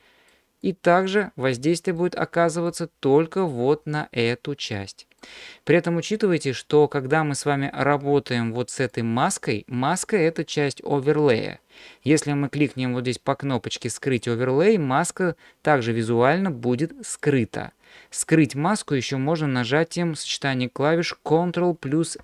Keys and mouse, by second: 0.0 middle click, 0.7 click, 2.0 middle click, 4.7 middle click, 9.0 click, 14.1 click, 17.2 click.